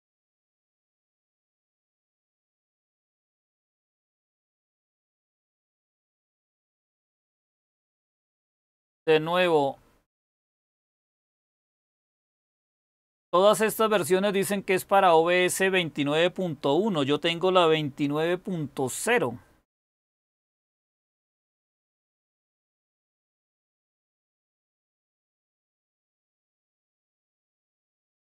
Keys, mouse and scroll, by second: 7.3 super+w, 20.8-21.4 scroll down 1, 21.4-22.7 scroll down 1, 22.7-23.6 scroll down 1, 23.6-26.6 scroll down 1, 26.6-28.3 scroll down 1.